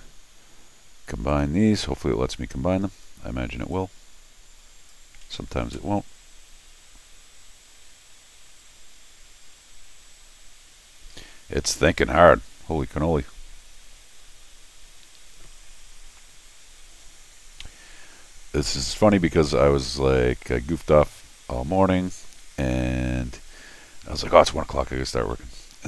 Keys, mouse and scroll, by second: 1.3 click, 3.0 scroll down 1, 3.7-4.9 drag, 25.3 middle click.